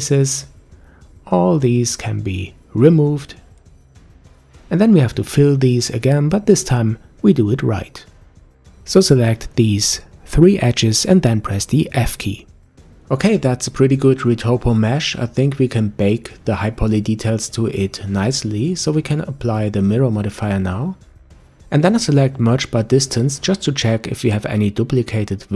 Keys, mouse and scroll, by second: 0.2 click, 0.4 Delete, 1.2 middle click, 1.6 click, 1.8 Delete, 2.5 click, 3.0 click, 3.5 click, 4.7 middle click, 5.1-5.5 scroll up 1, 5.5 click, 5.8 Delete, 6.4-8.7 middle drag, 8.7 click, 9.8 click, 10.7 shift+click, 10.9-11.3 shift+scroll up 1, 11.3 shift+click, 12.3 f, 12.8-13.7 scroll down 3, 13.7 middle click, 14.2 Tab, 14.3-14.8 scroll down 3, 14.8-16.3 middle drag, 18.0 Tab, 18.1 click, 18.9 Tab, 19.4 a, 21.5 F3.